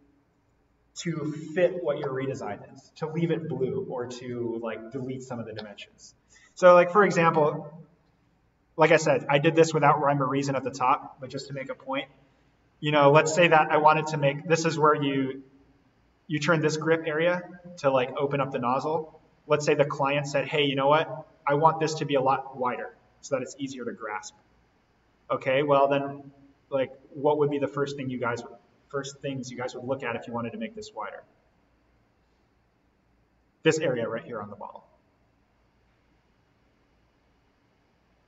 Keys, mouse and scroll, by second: 6.9 scroll down 1, 9.0-11.0 scroll up 1, 11.0 scroll down 1, 12.2-12.8 scroll down 1, 19.2-21.1 scroll up 1, 23.2-23.6 scroll down 1, 23.9-24.9 scroll up 1, 24.9-25.4 scroll down 1, 26.0-27.8 scroll up 1.